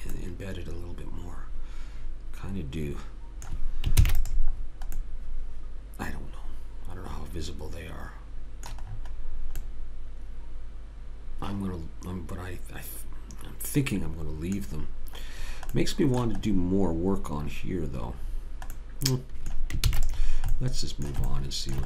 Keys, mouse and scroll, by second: 0.3 middle click, 4.0 ctrl+s, 8.9-11.5 middle drag, 14.8-16.6 middle drag, 19.9 ctrl+s.